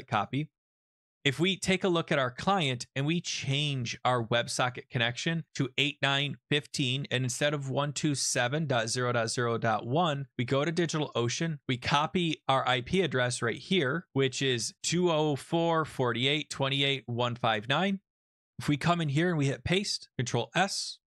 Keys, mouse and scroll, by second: 0.3 click, 2.1 click, 5.3 click, 5.4 click, 6.3 ctrl+v, 8.5 click, 10.2 click, 11.4 click, 17.4 alt+Tab, 19.3 ctrl+v, 20.1 ctrl+s.